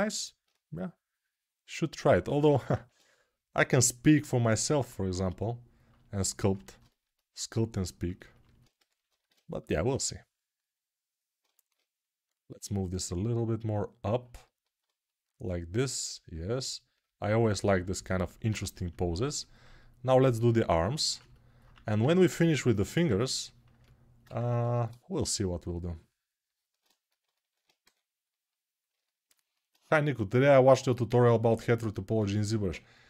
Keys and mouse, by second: 2.3 g, 21.5 1, 24.7-28.7 ctrl+drag, 28.7-33.0 alt+right drag.